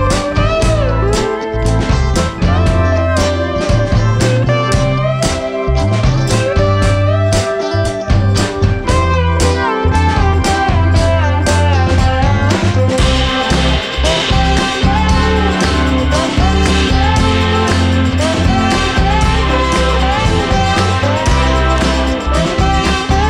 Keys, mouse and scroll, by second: 2.8-10.7 drag, 14.8 click, 16.3-17.8 scroll down 1, 17.8 click.